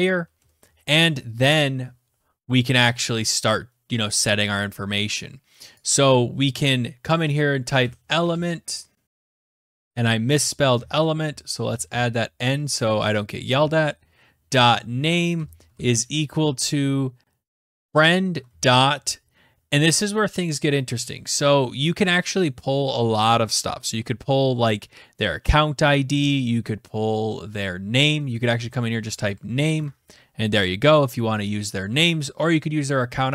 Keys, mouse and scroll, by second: 0.0-0.5 typing, 0.2 Right, 3.4 click, 5.8 click, 7.6-8.9 typing, 9.1 Tab, 10.7 Left, 10.8-12.3 typing, 14.3-16.2 typing, 15.2 Tab, 17.3-18.5 typing, 28.8-29.8 typing, 29.8 Tab.